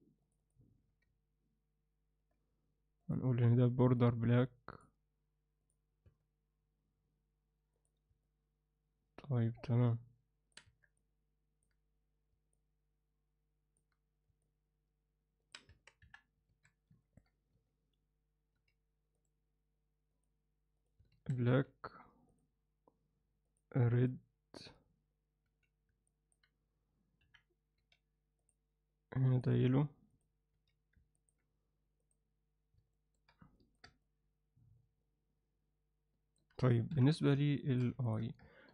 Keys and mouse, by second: 0.2 click, 0.4 click, 3.1 click, 3.9 click, 6.1 Tab, 7.8 click, 8.2-10.5 alt+middle drag, 10.7 Tab, 11.0 alt+middle click, 12.5-13.8 alt+middle drag, 14.4-15.5 alt+middle drag, 15.7 Tab, 16.0 KP_1, 16.5 alt+a, 17.0 ctrl+alt+middle click, 17.5 z, 18.5 z, 19.2 click, 20.1 click, 21.1 alt+a, 21.5 z, 23.5-24.7 drag, 25.4 z, 26.1 alt+middle click, 27.2 KP_1, 27.8 z, 28.4 click, 29.3-30.2 drag, 30.5 z, 31.1 ctrl+alt+middle click, 32.0 click, 32.9 alt+shift+middle click, 33.6 ctrl+alt+middle click, 34.0-36.4 alt+middle drag, 36.9 KP_1, 37.6 alt+shift+middle drag, 38.0 ctrl+alt+middle click.